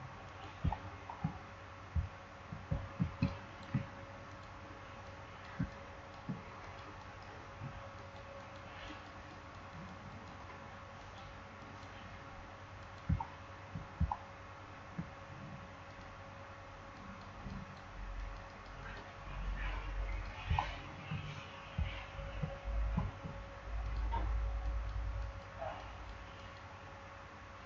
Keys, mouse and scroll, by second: 0.7 alt+scroll down 1, 2.1 alt+scroll up 1, 2.7 alt+scroll up 1, 3.0 space, 3.2 click, 3.5 space, 4.3 click, 5.5 space, 5.6 click, 5.9 space, 6.5 click, 13.1 alt+scroll down 1, 13.9 alt+scroll up 1, 15.8 click, 20.5 alt+scroll down 1, 21.9 alt+scroll up 1, 22.9 alt+scroll up 1, 23.7 click.